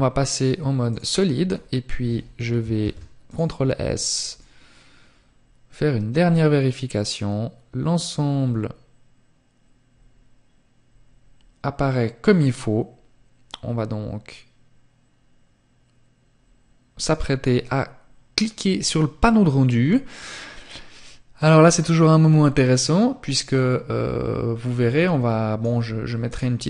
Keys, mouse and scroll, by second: 0.1-1.1 scroll up 3, 1.1 ctrl+s, 2.6 click.